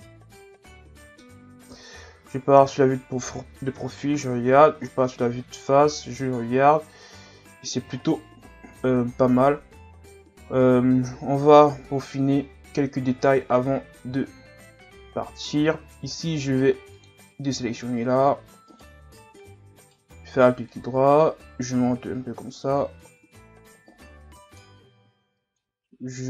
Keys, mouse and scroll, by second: 1.7 KP_3, 2.7-3.7 scroll up 8, 3.7 KP_1, 4.8-5.4 scroll down 1, 5.4 scroll down 4, 5.9-7.2 scroll up 6, 8.3 scroll up 5, 8.7 scroll down 1, 9.3 scroll down 8, 10.7-11.2 scroll up 1, 14.4-14.8 scroll up 4, 15.1 Tab, 17.0 click, 18.0-18.7 scroll up 2, 18.7 alt+right click, 19.8 alt+right click, 20.7-23.7 drag, 25.6-26.2 drag.